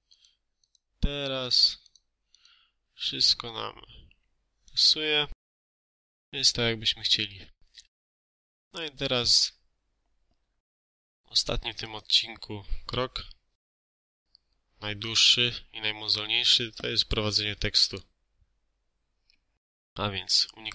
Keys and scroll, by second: 1.3 Escape.